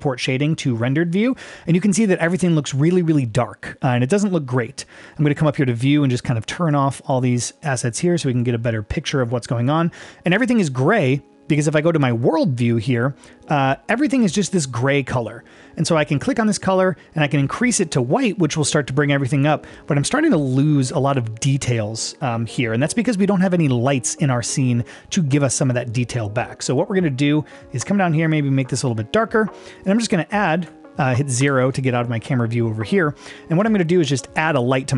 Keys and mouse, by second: 5.5-6.0 drag, 6.4 click, 7.1-7.6 drag, 7.8-8.4 drag, 12.1 click, 16.2 click, 29.8 click, 31.4 KP_0, 33.0 middle click, 33.7 n, 34.2 middle click.